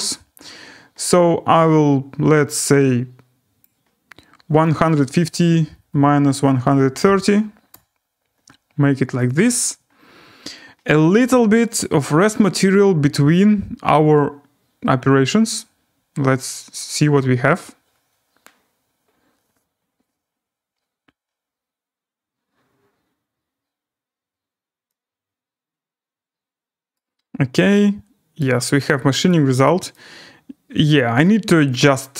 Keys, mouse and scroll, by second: 3.6 click, 4.4-7.5 typing, 7.7 Return, 9.2 click, 13.4-14.3 drag, 26.9-28.0 right drag, 29.3-32.1 click.